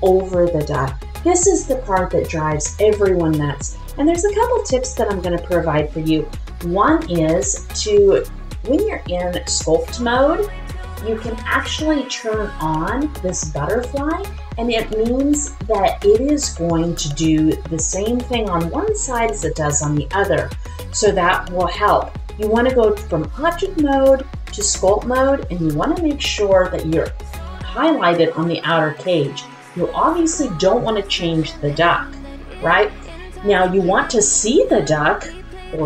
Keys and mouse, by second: 8.8-9.6 drag, 16.7 click, 34.0-35.8 middle drag.